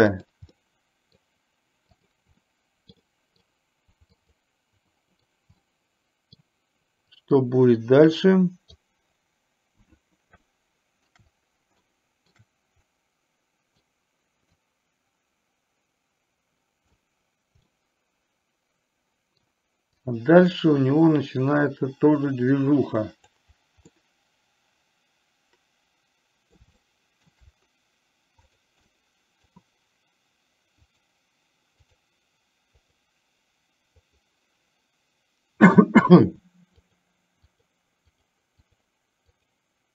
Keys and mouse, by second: 0.3 drag, 0.6-1.3 middle drag, 2.1 drag, 2.6 middle click, 3.1-3.6 middle drag, 4.2 click, 5.8-6.4 middle drag, 7.2-8.8 drag, 10.6-11.2 shift+middle drag, 11.9-12.4 shift+middle drag, 12.9-13.9 middle drag, 14.8-17.1 drag, 17.7-19.6 middle drag, 20.1-23.4 drag, 23.9-26.7 middle drag, 26.8-27.3 shift+middle drag, 28.6 drag, 28.9-29.4 middle drag, 30.9 click, 32.8 click, 34.1 click, 35.7 click, 38.2 click.